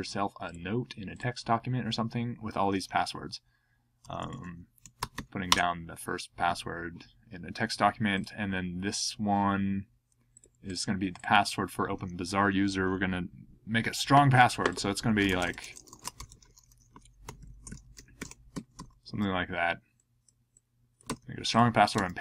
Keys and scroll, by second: 3.8-5.6 typing, 14.9-19.0 typing, 21.0 super+c, 21.9 super+v.